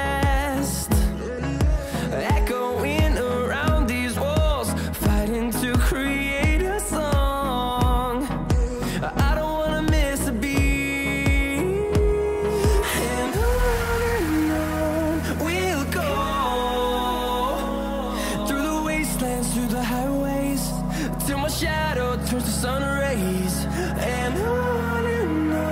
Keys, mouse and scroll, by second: 0.4-1.0 scroll down 1, 1.0-2.6 scroll up 1, 2.6 click, 2.6 click, 4.4-5.1 scroll down 1, 5.1-5.9 scroll up 1, 5.9 click, 6.2-8.0 scroll down 1, 8.0 click, 9.9-10.9 scroll down 1, 10.9 click, 13.2-14.6 scroll up 1, 14.6 click, 15.9-17.0 scroll down 1, 17.2 click, 19.4-20.3 scroll up 1, 20.3 click, 20.3 click, 21.3-22.0 scroll down 1, 22.0-25.5 scroll up 1, 25.5-25.7 scroll down 1.